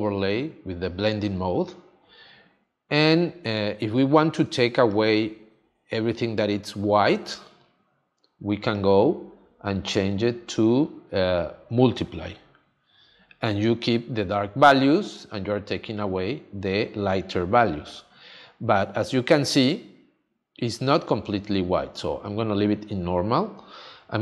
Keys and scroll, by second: 4.4 space.